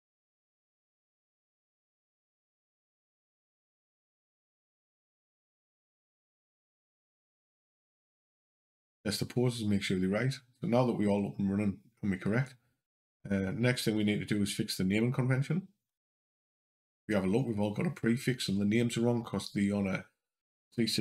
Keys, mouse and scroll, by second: 2.5 click, 4.9 click, 6.2 scroll up 2, 7.5 click, 8.0 click, 13.7 click, 14.7 click, 20.5 scroll down 2.